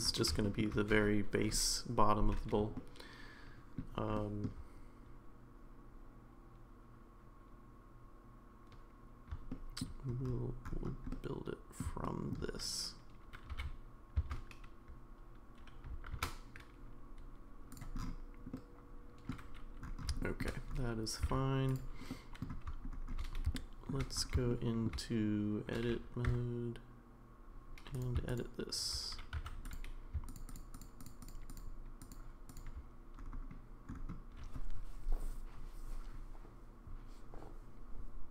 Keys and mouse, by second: 0.4 shift+middle drag, 2.7-3.8 shift+middle drag, 4.1 shift+middle drag, 9.5-9.8 shift+middle drag, 11.1-11.8 middle drag, 12.0 shift+middle drag, 13.5 g, 18.5 middle click, 20.2 shift+middle drag, 21.2 g, 22.1-22.4 middle drag, 23.6 shift+middle drag, 24.5-24.9 shift+middle drag, 26.3 Tab, 27.9 click, 29.4 3, 29.7 click, 30.3 click, 30.5 click, 30.7 shift+click, 31.0 shift+click, 31.2 shift+click, 31.5 shift+click, 32.1 shift+click.